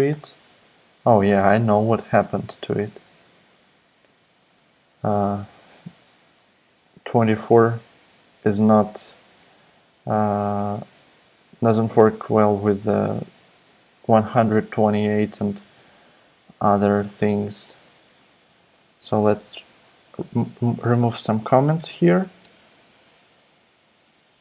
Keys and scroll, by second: 0.1 Return, 5.4 super+Tab, 15.2 super+c, 15.6 super+Tab, 17.1 super+v, 18.9 Right, 19.2 BackSpace, 19.4 BackSpace, 19.5 BackSpace, 19.9 Down, 20.1 Down, 20.3 Down, 20.6 Down, 20.6 Right, 21.1 Up, 21.3 Right, 21.7-22.8 typing.